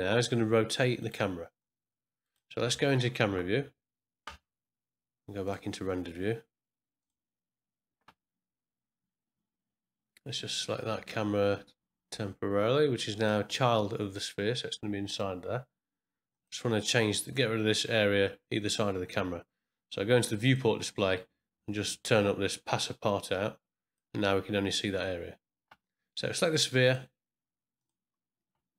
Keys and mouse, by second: 1.5 click, 3.2 KP_0, 7.0 click, 13.2 click, 15.1 click, 16.3 click, 20.4 click, 20.9 middle click, 23.1 click, 26.9 click, 27.8 click.